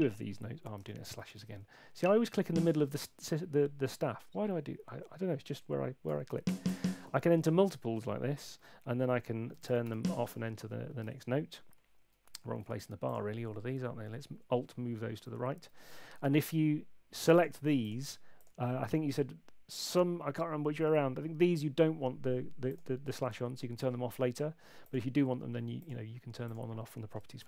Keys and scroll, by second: 0.9 super+z, 1.0 super+z, 1.2 super+z, 1.3 super+z, 1.9 Up, 6.1 4, 9.4-10.3 typing.